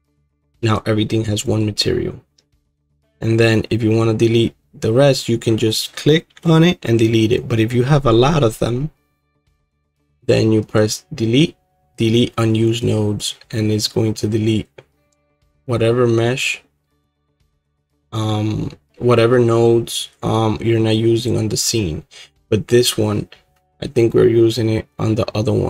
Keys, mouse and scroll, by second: 0.7 right click, 1.4-17.9 alt+drag, 17.9-23.0 right drag.